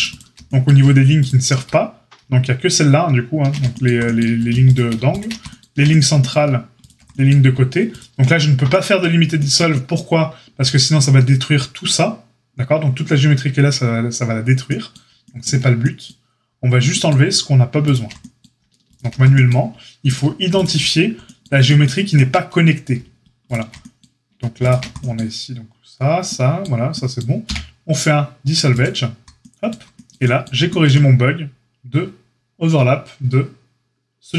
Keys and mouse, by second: 0.0 alt+shift+click, 0.1-1.2 alt+shift+middle drag, 1.2 alt+shift+click, 1.6-17.8 alt+middle drag, 5.0 alt+shift+click, 6.8 alt+shift+click, 7.8 alt+shift+click, 17.8 alt+shift+click, 17.9-20.0 alt+shift+middle drag, 20.0 alt+shift+click, 20.1-23.4 alt+shift+middle drag, 23.4 alt+shift+click, 23.4-34.3 alt+shift+middle drag, 27.4 x.